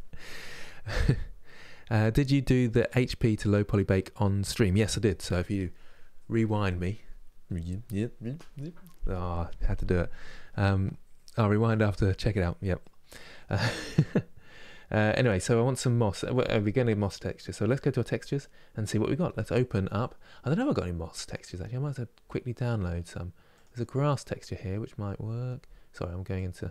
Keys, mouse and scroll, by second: 13.6-19.2 middle drag, 19.2-26.2 drag.